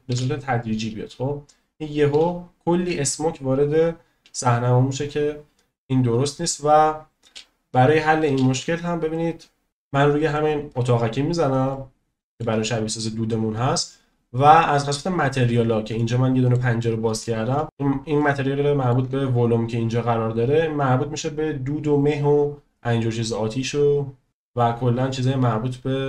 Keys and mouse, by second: 0.1 space, 2.2 space, 3.9-5.1 drag, 7.2 space, 8.3 space, 11.7-12.4 shift+middle drag, 16.0 shift+click, 17.6 shift+click, 18.2 shift+click.